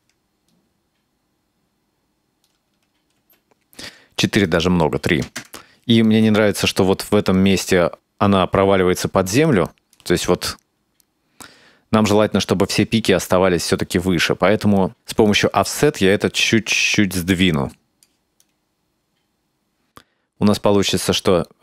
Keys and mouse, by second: 3.2 space, 4.5-5.8 drag, 6.2-10.0 drag, 15.3-18.1 drag, 18.4-21.6 drag.